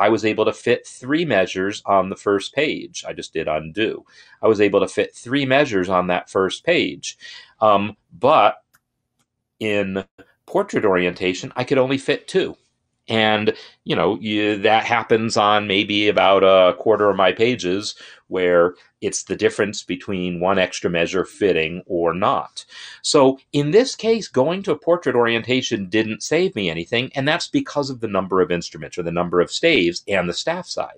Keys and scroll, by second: 8.6 ctrl+shift+z.